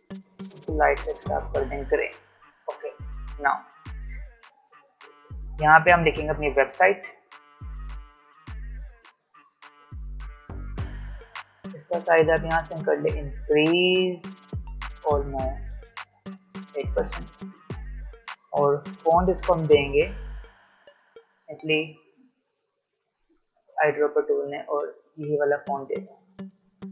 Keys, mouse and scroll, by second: 3.3-3.7 alt+scroll down 1, 3.7 space, 4.0 click, 4.2 space, 5.4-6.0 alt+scroll up 1, 8.0 t, 8.9 click, 12.1 click, 16.2-18.9 drag, 18.9 i, 23.5 click, 26.2 v.